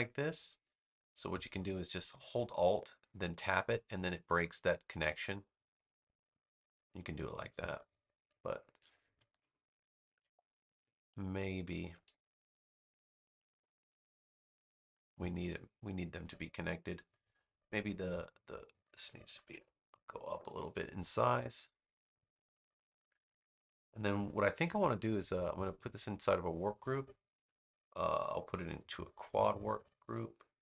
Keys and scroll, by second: 8.5 super+z, 10.0 super+z, 19.2 4, 19.4 Return.